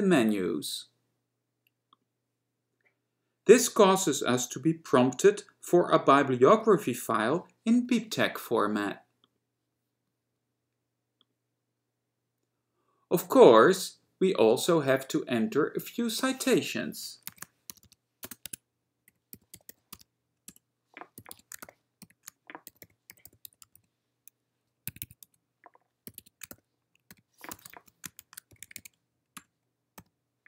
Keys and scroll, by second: 16.3 Return, 18.5 Tab, 19.0-24.4 typing, 24.9 Escape, 25.1 Escape, 25.3 Right, 26.0-30.1 typing, 29.4 Return.